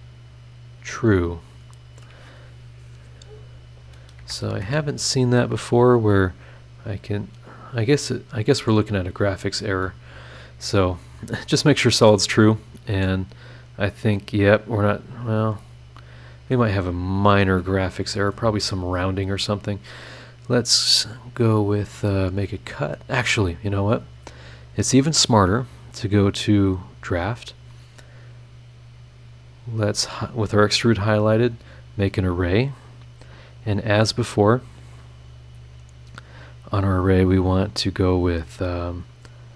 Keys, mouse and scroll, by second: 0.1 click, 3.8 click, 4.2 space, 6.1-7.8 middle drag, 6.1-7.8 drag, 7.8-8.9 right drag, 8.9 scroll down 1, 9.3-9.6 scroll up 1, 9.8 click, 10.4 scroll down 1, 10.7 click, 11.2 scroll up 1, 12.4 scroll down 1, 13.0 middle click, 13.1 click, 13.6 scroll down 2, 16.7 scroll down 2, 17.1-17.5 scroll up 2, 17.6 middle click, 17.7 right click, 18.2 click, 18.3 right click, 18.5 scroll up 2, 18.7 scroll down 2, 18.8 scroll up 2, 19.0-19.5 scroll down 4, 19.8-20.1 scroll up 2, 25.4 click, 26.9 click, 31.5 click, 39.0 click, 39.3 click.